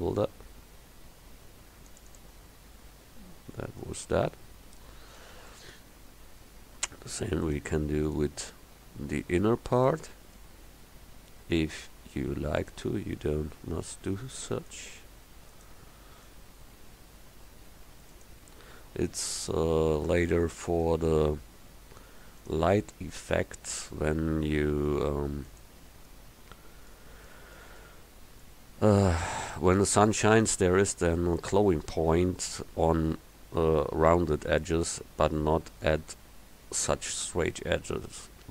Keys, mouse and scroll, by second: 2.1 click, 2.6 Tab, 4.2 click, 6.5 Tab, 9.7-10.9 right drag, 23.1 click, 28.4 middle click, 29.5-30.8 middle drag.